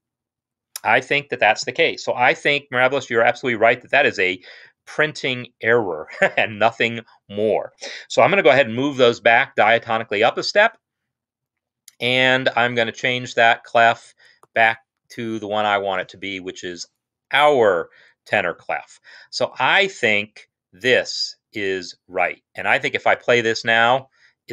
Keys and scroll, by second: 9.5 alt+shift+].